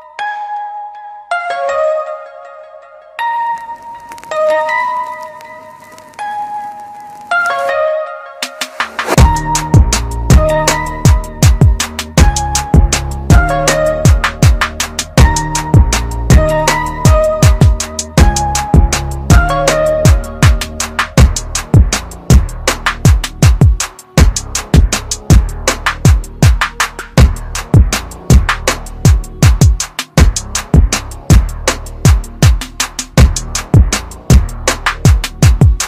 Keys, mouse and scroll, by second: 3.0-3.3 scroll up 1, 3.8 click, 8.4-8.9 typing, 9.0 click, 11.2-11.7 typing, 12.0 click, 13.4 scroll down 1, 14.1 click, 14.9 scroll down 1, 16.3 click, 17.8-18.4 scroll up 1, 18.4-19.1 typing, 19.2 click, 22.2 scroll down 1, 23.1-23.6 scroll up 1, 25.1 typing, 25.8 click, 32.7 ctrl+KP_Subtract.